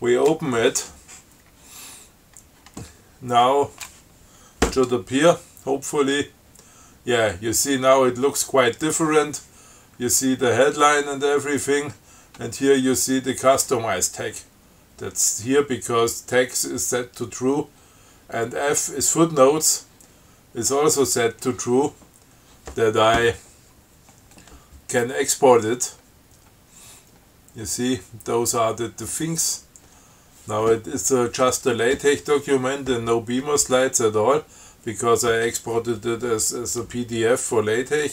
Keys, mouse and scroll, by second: 7.5-8.1 scroll down 4, 9.1 scroll down 2, 24.6 scroll down 2, 25.4 scroll down 2, 26.3 scroll down 2, 27.5-28.9 scroll down 6, 29.0 scroll down 2, 29.2-29.6 scroll up 2, 29.7-30.0 scroll down 2, 34.0 click.